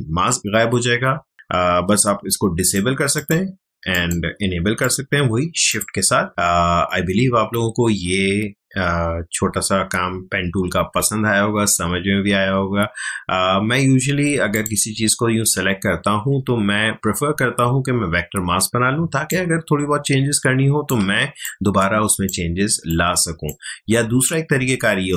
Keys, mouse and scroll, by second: 1.1 shift+click, 1.3 shift+click, 14.5 shift+click, 18.9 ctrl+space, 19.2 ctrl+click, 19.4 ctrl+space, 21.4 click, 21.6 space, 22.8 ctrl+click, 24.0 ctrl+alt+z.